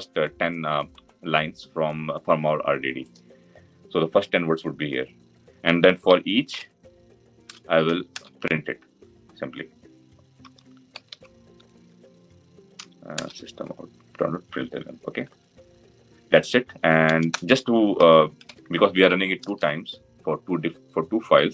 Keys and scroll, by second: 8.0 Return, 13.0 Return, 19.3 Return.